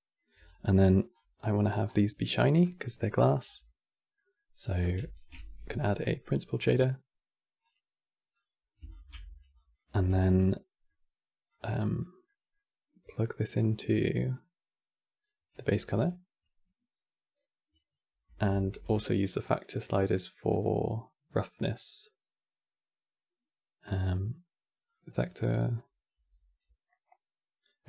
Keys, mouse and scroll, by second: 0.1 scroll down 5, 0.4-0.8 middle drag, 0.8 scroll down 3, 1.5 scroll down 5, 2.3-3.0 scroll down 6, 3.1-3.5 scroll up 6, 3.9 middle click, 4.5 click, 4.7 x, 5.1 shift+a, 8.6 ctrl+shift+click, 8.9-9.3 middle drag, 9.3 drag, 9.6 g, 10.2 middle click, 11.2 click, 12.0-14.0 middle drag, 14.0 click, 15.5 q, 18.2 shift+a.